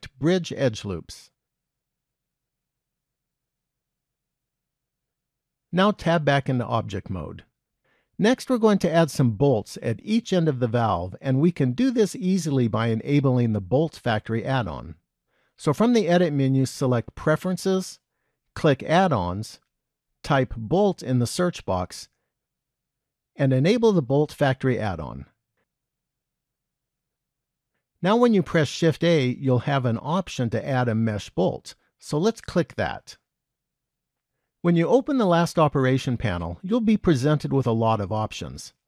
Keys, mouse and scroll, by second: 2.7 middle click, 6.3 Tab, 15.1 click, 28.6 shift+a, 35.2 click.